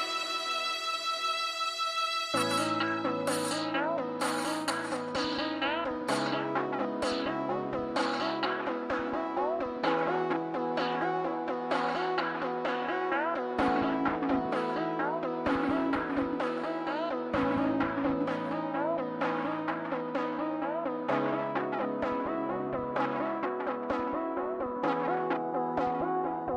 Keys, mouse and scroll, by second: 4.8 middle click, 10.7 scroll down 1, 11.0 middle click, 11.2 middle click, 12.1 scroll up 1, 12.2 scroll down 1, 12.6 scroll up 1, 12.8-14.7 scroll down 1, 20.7 scroll down 1, 20.7 scroll up 1, 23.4 middle click, 25.9 middle click.